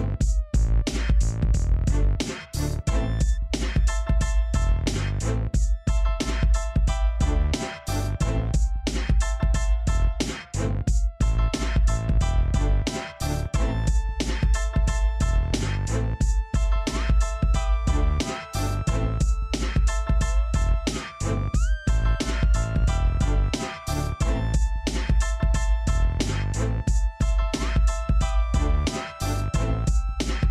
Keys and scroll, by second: 8.3 0, 8.7 Return.